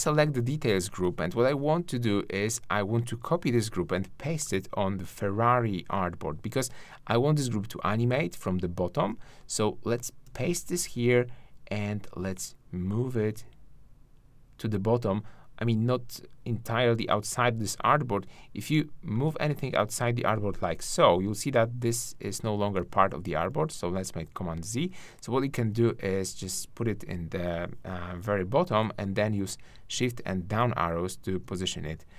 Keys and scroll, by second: 1.0 shift+`, 3.4 super+c, 10.2 super+v, 22.7 super+z, 28.0 shift+Down.